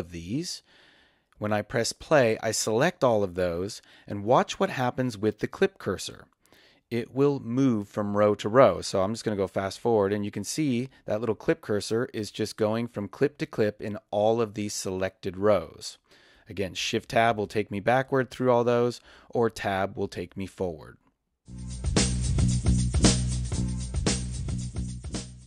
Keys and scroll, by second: 1.3 space, 8.1 Right, 10.9 Right, 16.7 shift+Tab.